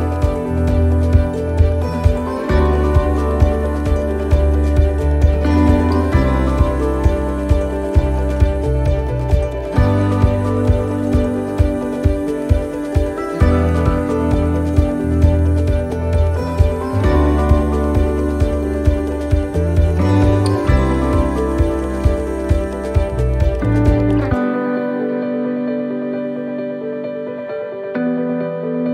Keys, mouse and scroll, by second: 0.9 shift+d, 3.4 click, 4.8 middle click, 5.5 shift+middle click, 5.9 scroll up 4, 6.2 middle click, 6.6 scroll down 1, 7.2 scroll down 1, 7.2 right click, 7.9 click, 9.1 scroll up 3, 9.4 middle click, 10.0 right click, 11.0 l, 11.5 l, 12.3 x, 14.0 right click, 14.2 right click, 15.1 l, 15.6 l, 16.4 right click, 18.7 l, 18.7 k.